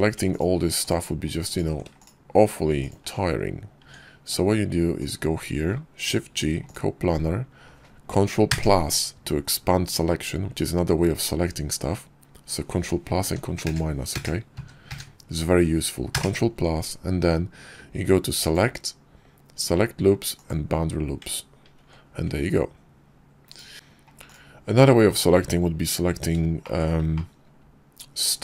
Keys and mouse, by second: 0.1 ctrl+click, 0.6 ctrl+click, 1.8 shift+click, 2.6 shift+click, 3.6 Tab, 4.8 click, 5.6 shift+middle click, 5.9 shift+g, 8.3 ctrl+KP_Add, 13.1 ctrl+KP_Subtract, 13.5 ctrl+KP_Add, 21.5 ctrl+b, 27.0-28.1 drag, 28.1-28.4 middle drag.